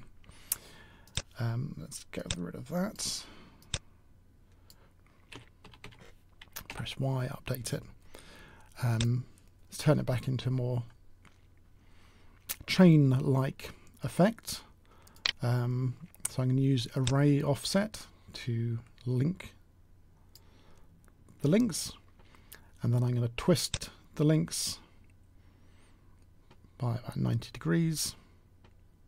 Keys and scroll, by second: 5.2 s, 5.5 s, 6.6 y.